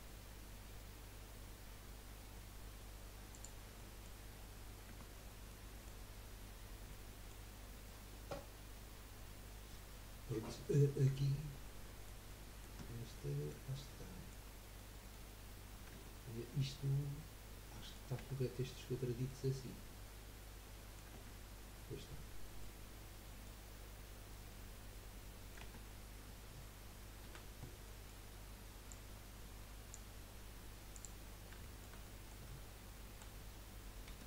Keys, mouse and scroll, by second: 3.8-4.9 middle drag, 4.9 Tab, 5.2 scroll down 2, 5.5 middle click, 6.7 scroll up 1, 6.9 middle click, 7.5-7.8 scroll down 2, 8.1-10.9 middle drag, 12.3-12.8 middle drag, 12.8 Tab, 13.2-14.6 middle drag, 14.6 scroll up 3, 14.7-15.9 middle drag, 15.9 Tab, 17.7 middle click, 18.2 Tab, 19.3-21.3 middle drag, 21.3 Tab, 22.5 scroll down 1, 22.7 middle click, 23.7-24.5 scroll down 5, 24.5 middle click, 25.8 Tab, 27.2 a, 27.8-28.9 middle drag, 28.9 click, 30.9 click, 31.3-31.6 scroll up 2, 31.6 shift+middle click, 32.0 scroll up 1, 32.1-33.1 middle drag, 33.1 KP_1, 34.1 KP_3.